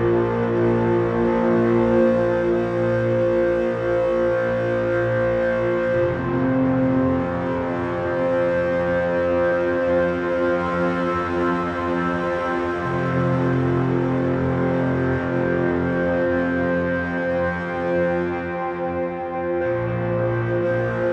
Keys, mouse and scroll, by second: 4.6 shift+z, 8.1-9.9 drag, 11.5 g, 17.2 g.